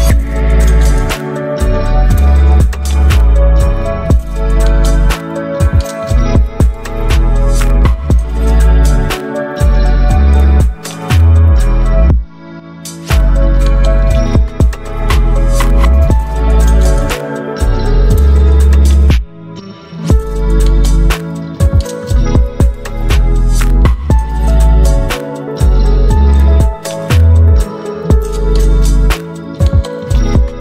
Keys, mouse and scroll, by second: 1.9-3.5 drag, 3.5 6, 3.6 Return, 5.8 click, 10.6 ctrl+v, 11.4 Return, 14.3 click, 15.3 alt+scroll up 1, 16.2-19.7 drag, 19.7-23.8 drag, 23.8 ctrl+t, 24.7 alt+scroll up 1, 26.6-29.3 drag, 29.3 Return.